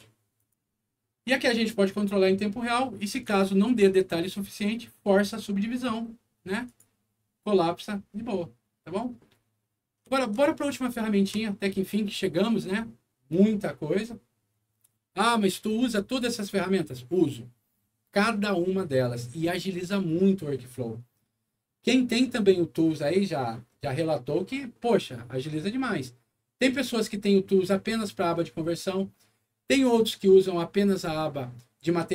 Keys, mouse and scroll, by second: 0.3 click, 2.6 middle click, 3.3 alt+middle click, 6.6 alt+click, 9.2 middle click, 10.1 alt+middle click, 10.5 alt+scroll down 1, 11.0 alt+middle click, 12.1 alt+scroll up 1, 12.6 alt+middle click.